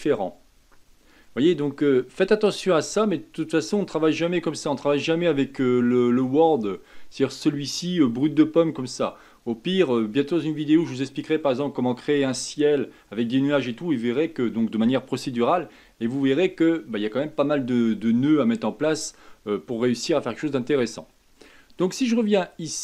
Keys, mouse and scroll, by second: 2.2 scroll down 1, 7.3 click.